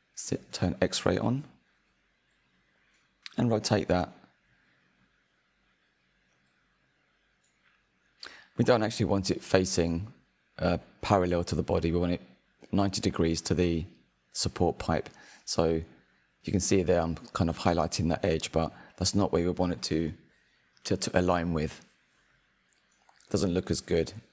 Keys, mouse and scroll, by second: 2.1-2.6 drag, 2.6 scroll up 3, 2.9-3.6 shift+middle drag, 3.6-4.1 scroll up 2, 4.9 r, 8.1-8.7 drag, 8.7-9.3 shift+middle drag, 9.3-10.5 scroll up 2, 10.5 click, 13.8 click, 14.5-17.1 scroll up 2, 17.1 click, 20.9-22.2 shift+middle drag, 22.2 r.